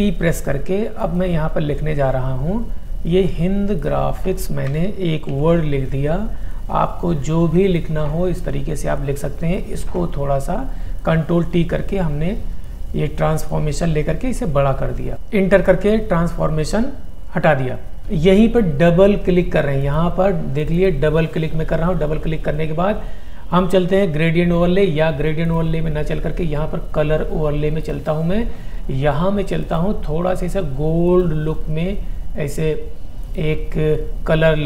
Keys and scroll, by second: 2.7 l, 5.3 ctrl+t.